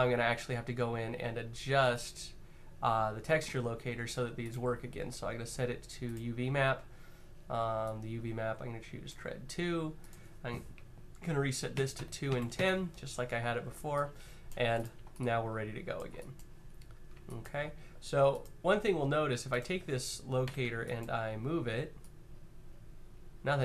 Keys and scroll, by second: 11.5-12.1 typing, 11.7 Tab, 12.3 Tab, 14.4 q, 20.2 w.